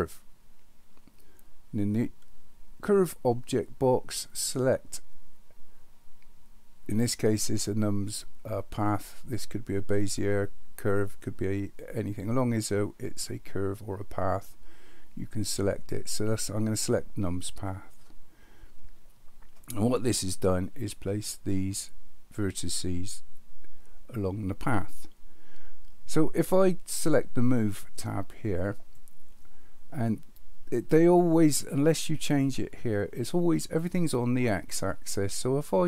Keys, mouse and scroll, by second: 4.3-17.7 drag, 28.7 click.